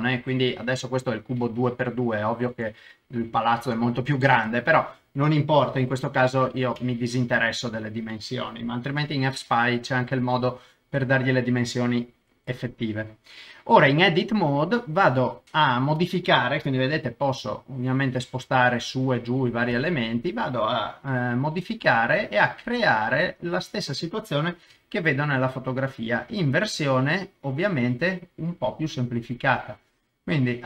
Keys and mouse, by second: 9.1 3, 14.5 middle click, 15.4-16.5 middle drag, 16.9 g, 17.0 middle click, 18.6 Escape, 19.7 KP_0, 21.1 g, 21.2 middle click, 23.0 click, 24.7 g, 24.8 middle click, 25.9 click, 27.9 middle click, 29.7 click.